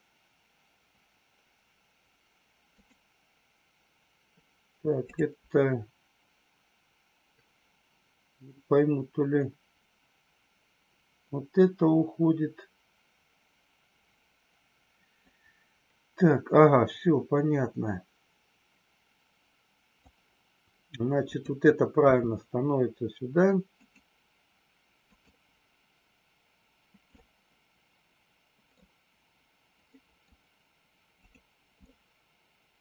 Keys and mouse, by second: 5.0 click, 15.3-20.1 drag, 24.9 click, 27.0-28.8 middle drag, 29.9 middle drag, 31.3-31.8 drag, 31.8-32.8 middle drag.